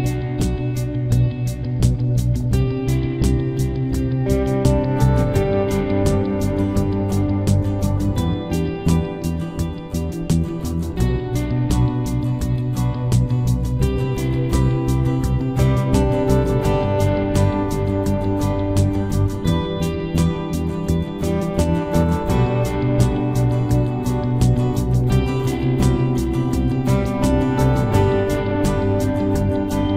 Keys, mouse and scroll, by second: 1.6 right click, 2.4 b, 2.9 g, 5.9 g, 7.4 g, 9.5 ctrl+Tab, 10.4-12.2 drag, 11.3 z, 12.2 middle click, 14.6-15.9 drag, 15.9 ctrl+z, 15.9 right click, 16.6 s, 17.8 e, 18.9 ctrl+z, 19.3 s, 21.2 KP_3, 21.6 Tab, 22.7 Tab, 23.2 ctrl+z, 23.4 ctrl+z, 23.9 ctrl+z, 24.4 ctrl+s, 24.9 z, 25.2-27.8 middle drag, 28.3 x.